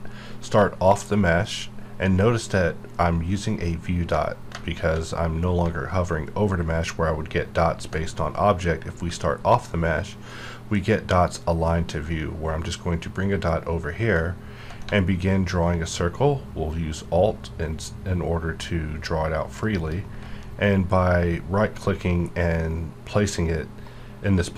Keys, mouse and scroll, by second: 10.7 ctrl+Num_Lock, 14.1-19.6 ctrl+drag, 19.6 alt+right click.